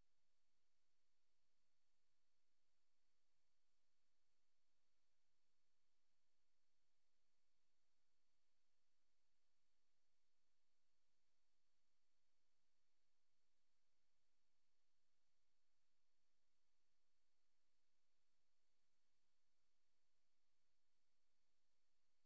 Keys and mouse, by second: 7.1 Right, 8.4 click, 9.0 click, 11.0 click, 15.6 click, 16.1 click, 17.3 Right, 18.0 click, 19.2 click, 19.8 click.